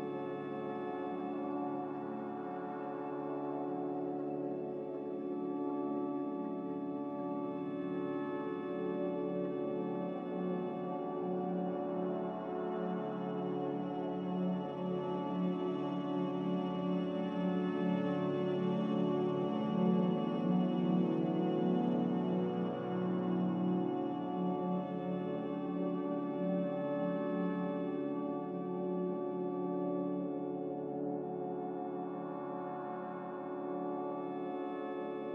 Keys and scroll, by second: 21.6 g, 24.4 typing, 24.7 Return, 27.2 typing, 27.5 Return, 32.5 Escape, 34.4 a.